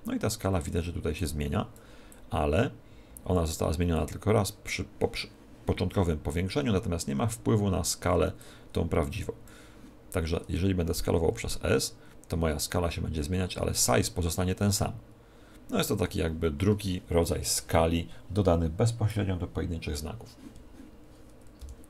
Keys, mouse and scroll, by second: 1.1 click, 2.0 click, 3.9 click, 8.3 click, 11.2 s, 21.5 n.